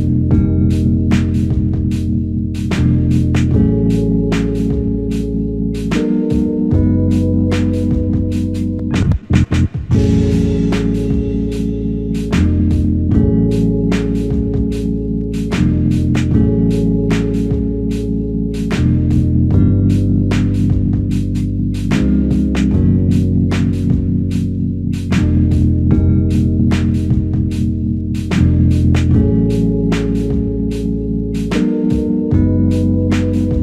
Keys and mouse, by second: 0.9 alt+click, 2.2 f, 3.3 alt+shift+click, 4.1 ctrl+alt+click, 4.9 alt+click, 6.1 double click, 11.6 alt+click, 13.0 double click, 14.5 alt+click, 15.4 double click, 18.9 alt+click, 20.8 shift+click, 22.3 shift+click, 23.0 alt+shift+click, 31.9 double click.